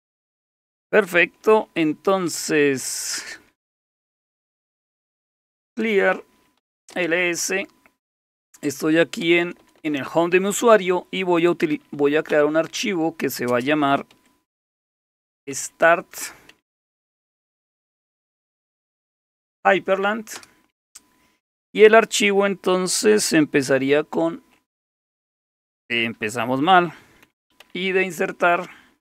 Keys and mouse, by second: 2.3-3.2 typing, 3.4 Return, 4.3-7.1 typing, 9.2 Return, 9.4 Return, 9.6 Return, 9.8 Return, 9.9 Return, 11.5-12.3 typing, 13.5-20.9 typing, 24.1 #, 27.6 i.